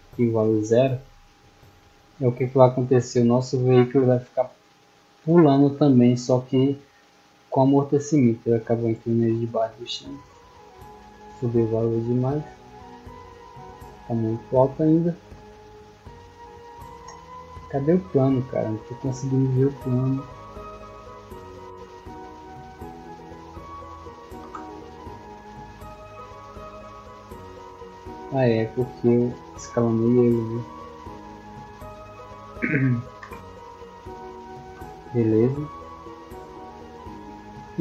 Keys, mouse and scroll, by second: 4.1 click, 8.0 middle click, 9.3-10.5 drag, 13.6-14.1 drag, 14.4 middle click, 17.5 right click, 18.0 middle click, 18.9 right click, 20.3 click, 21.3 click, 21.6-22.4 scroll down 1, 23.3 scroll down 1, 25.1-26.0 middle drag, 26.8 right click, 27.1 right click, 27.5 middle click, 27.6-28.1 scroll down 2, 28.4 s, 29.2 click, 29.6 s, 30.2 click, 30.6 s, 31.4 click, 32.0 s, 32.5 click, 33.7-34.7 middle drag.